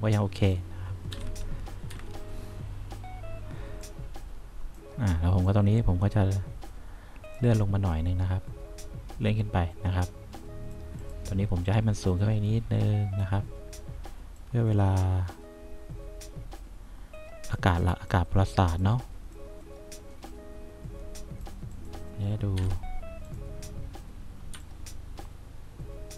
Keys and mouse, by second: 1.3 F2, 2.1 F3, 5.9-7.1 drag, 8.9-11.0 drag, 12.2-13.3 drag, 14.5-17.6 drag, 18.3 click, 22.7 F1, 24.7 3, 24.8 click.